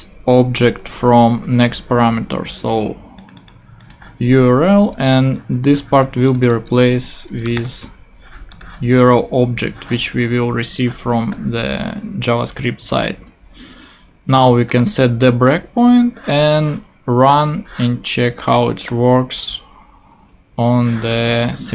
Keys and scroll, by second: 0.5 BackSpace, 4.7 shift+;, 7.2-8.1 typing.